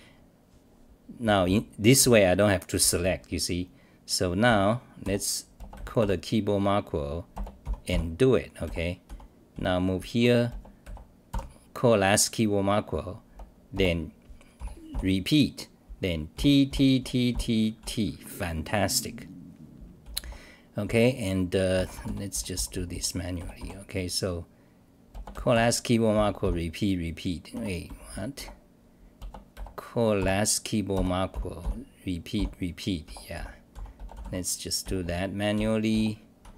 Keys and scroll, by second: 0.2-0.5 scroll down 5, 1.2 t, 2.0 r, 5.0-6.5 typing, 7.9-12.0 typing, 14.6-18.3 typing, 19.0-19.4 scroll down 8, 20.2 t, 20.8 t, 22.3 t, 23.4 g, 25.3-26.1 typing, 27.5 Home, 27.6-28.8 typing, 31.4-34.8 typing.